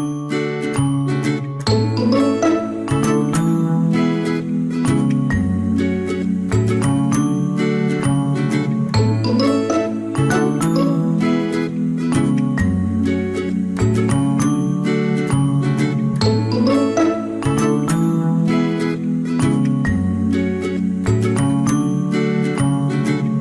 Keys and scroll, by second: 5.0 Delete, 7.7 ctrl+g.